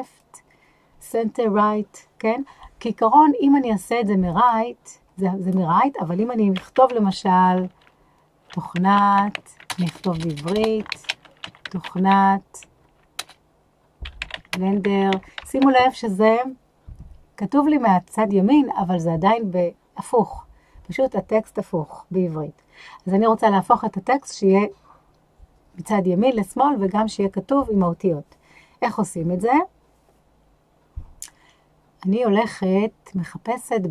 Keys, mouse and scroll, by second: 0.0-4.5 drag, 7.4-12.1 typing, 13.2 BackSpace, 14.2-15.6 typing.